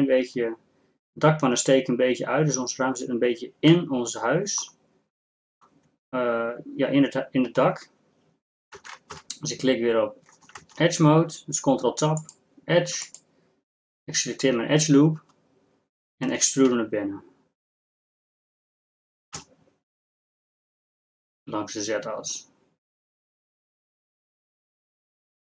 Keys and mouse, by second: 8.8 ctrl+Tab, 9.3 2, 10.6 ctrl+Tab, 16.8 e.